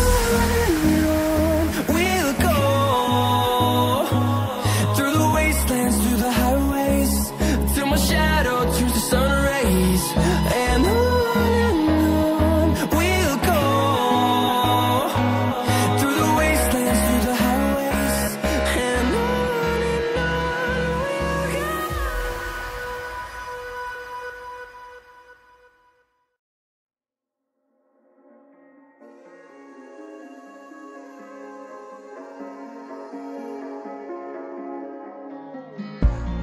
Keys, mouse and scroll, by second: 0.3 click, 4.8 Right, 4.9 Right, 5.0 Right, 5.2 Right, 5.5 Right, 6.0 Up, 6.2 Up, 7.3 Up, 7.4 Up, 7.7 Up, 7.8 Up, 8.4 Left, 8.5 Left, 8.6 Left, 8.7 Left, 9.0 Left, 9.4 Down, 9.5 Down, 9.6 Down, 9.8 Down, 10.1 Down, 10.5 Down, 11.1-11.4 scroll down 1, 11.5 scroll up 1, 12.4 click, 19.4 Down, 19.6 Down, 19.7 Down, 20.9 click, 23.5 ctrl+z, 24.0 click, 25.2 Right, 26.4 Down, 26.8 Down, 27.4 Down, 27.6 Down, 27.9 Right, 28.7 click, 28.9-29.4 scroll down 1, 29.4 click, 31.7 scroll up 1, 32.2 ctrl+z, 32.9 click, 34.6 click.